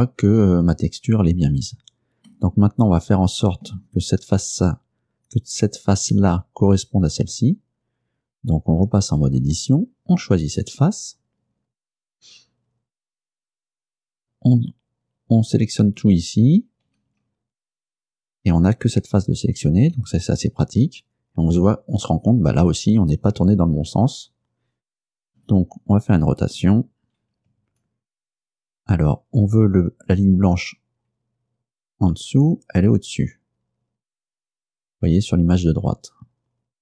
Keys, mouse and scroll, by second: 0.5 scroll down 2, 1.0 scroll down 2, 2.4-3.9 middle drag, 9.1 Tab, 10.5 right click, 17.0 a, 19.9 g, 25.5 Escape, 26.7 r.